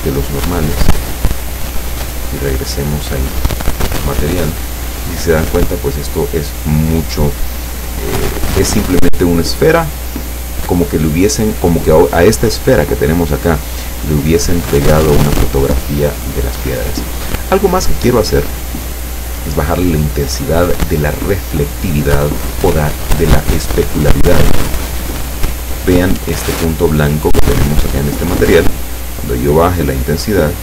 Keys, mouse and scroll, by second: 1.0 click, 2.3 click, 3.7 click, 17.6-18.6 scroll down 3, 19.3-19.6 scroll up 2, 29.5-30.6 drag.